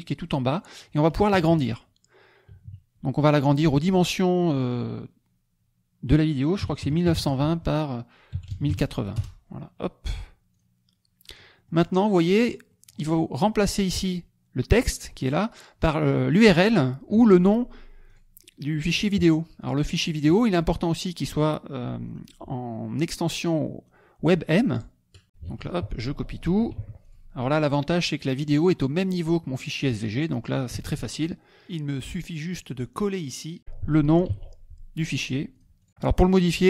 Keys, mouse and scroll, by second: 0.5 middle click, 1.3 KP_Subtract, 3.2 click, 3.5 middle click, 4.4 click, 6.8 KP_9, 7.0 KP_2, 7.1 KP_0, 7.5 Tab, 8.3 KP_1, 8.5 KP_0, 8.6 KP_8, 9.1 KP_0, 9.1 Return, 10.6 click, 11.2-12.0 scroll up 3, 11.4 middle click, 12.5 scroll up 2, 12.6 click, 18.1 click, 18.8 click, 19.8-23.6 drag, 24.7 click, 25.2 F2, 26.0 ctrl+a, 26.4 ctrl+c, 27.1 ctrl+click, 30.8 alt+Tab, 31.6 click, 32.1 click, 32.7 ctrl+click, 33.0 ctrl+a, 34.3 ctrl+v, 35.5 click, 35.8 click.